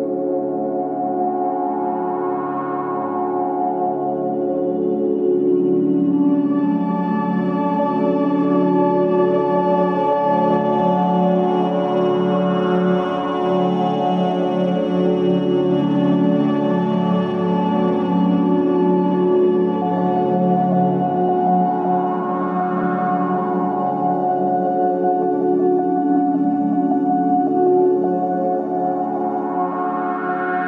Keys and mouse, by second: 1.9-3.4 middle drag, 5.9 ctrl+r, 15.9 ctrl+r, 20.5-22.7 middle drag, 24.4 Tab, 25.0 Tab, 27.4-27.8 middle drag, 28.9-30.6 middle drag.